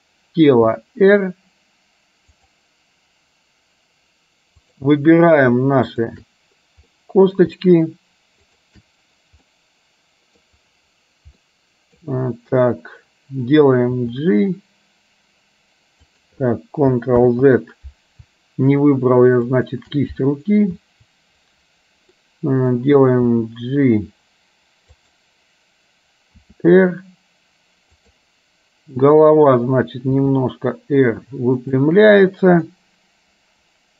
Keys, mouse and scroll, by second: 0.6 r, 4.8 click, 7.0 middle click, 8.5 shift+click, 9.5-10.5 middle drag, 11.5 middle click, 14.1 g, 18.1 ctrl+z, 19.8 click, 22.4 middle click, 23.9 g, 26.6 r, 30.4 r, 32.8-33.9 middle drag.